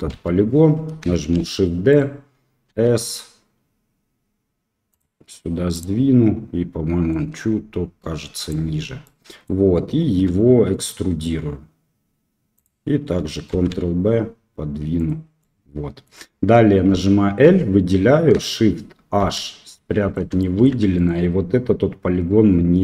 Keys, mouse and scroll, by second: 0.0 KP_1, 1.4 shift+d, 2.6 s, 5.7 click, 7.1-8.5 drag, 9.0 middle click, 10.3 e, 13.5 ctrl+b, 15.3 middle click, 16.8 l, 19.2 shift+h, 19.7 click, 20.3 shift+click, 20.9-22.2 drag.